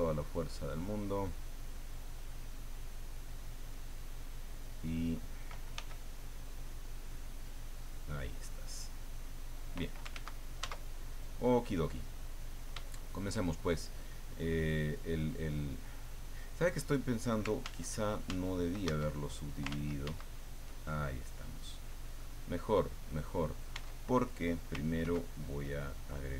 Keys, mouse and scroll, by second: 0.9 click, 1.4 click, 2.4 click, 2.9-4.2 drag, 5.7 f, 6.7 click, 7.3-9.9 drag, 10.1 ctrl+z, 11.3-12.7 middle drag, 12.9-14.3 shift+drag, 14.4-15.5 drag, 15.6 click, 17.6 ctrl+z, 18.9 ctrl+Tab, 19.7 ctrl+z, 23.7 Tab, 25.0 ctrl+2.